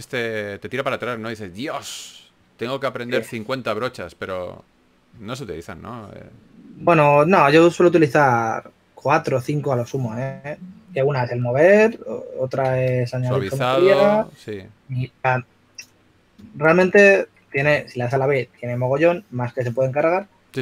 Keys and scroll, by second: 2.0 typing, 3.1 typing, 5.2 typing, 11.1 typing, 13.9-14.7 typing, 15.9-16.8 typing, 18.1 typing.